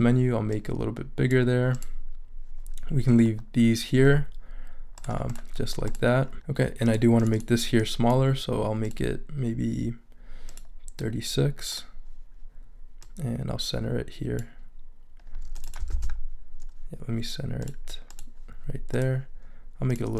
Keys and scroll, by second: 15.9 super+a.